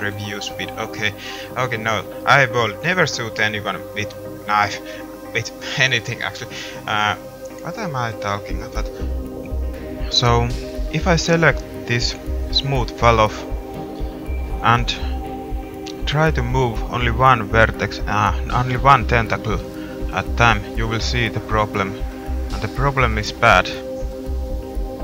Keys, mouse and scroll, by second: 1.5-3.1 middle drag, 8.2-15.0 drag, 8.2-15.0 middle drag, 15.2 middle click, 18.3 middle click, 19.4 g, 21.2-23.9 middle drag.